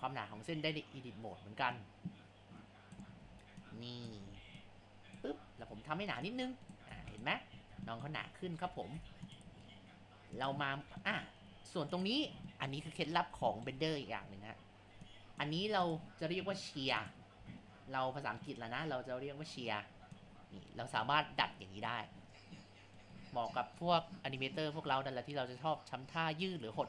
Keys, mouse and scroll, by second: 8.3 scroll, 8.3-8.6 scroll down 3, 8.6 ctrl+z, 9.0 Tab, 10.4 click, 11.0-12.0 shift+middle drag, 12.0 click, 12.5 shift+middle click, 12.9-13.5 scroll down 4, 13.5 shift+middle click, 13.8-14.2 scroll up 3, 14.2 Tab, 15.5 Tab, 16.8 Tab, 17.4 a, 20.3 Left, 20.7-23.3 drag.